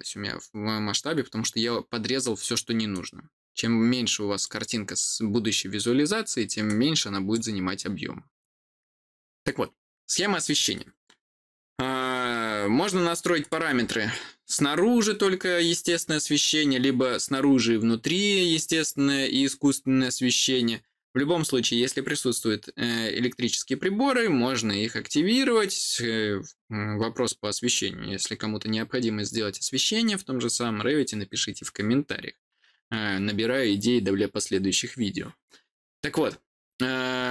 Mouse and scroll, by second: 2.8-4.3 drag, 6.6 click, 13.3 click.